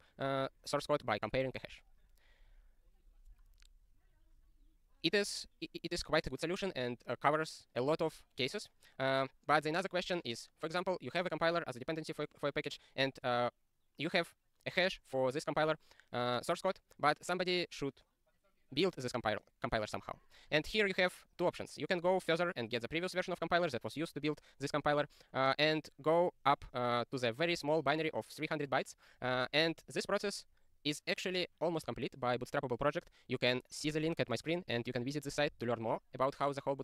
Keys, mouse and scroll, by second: 34.7 click, 35.3 click.